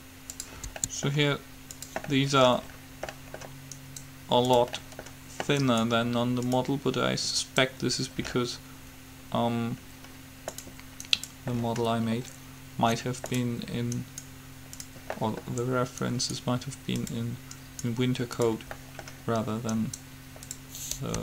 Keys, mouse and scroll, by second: 1.0 s, 4.0-5.2 right drag, 5.4 right click, 7.6 right click, 8.4-9.4 right drag, 11.3-13.0 right drag, 14.1-15.4 right drag, 17.2-19.0 right drag, 20.7-21.2 right drag.